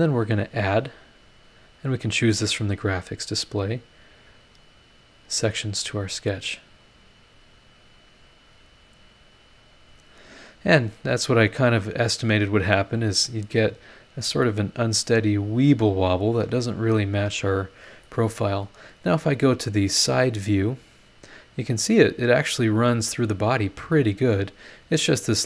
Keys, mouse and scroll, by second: 0.7 click, 1.8 click, 3.2 click, 4.5 click, 5.7 click, 6.8 click, 8.3 click, 9.4 click, 13.5 middle click, 13.6 right click, 13.7-17.1 drag, 16.5 right click, 19.9 click, 20.5-21.1 scroll down 2, 21.1-21.6 scroll up 1, 24.6 scroll down 1, 25.2 scroll up 1.